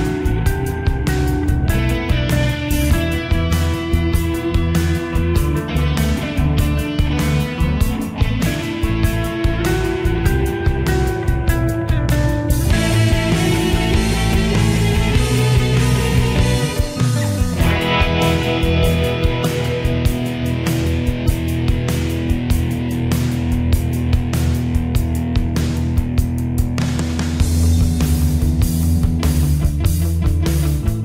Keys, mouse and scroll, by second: 0.1 Delete, 6.0 click, 7.8 Delete, 10.8 click, 11.3 F4, 13.4 typing, 13.9-31.0 drag, 24.2 typing.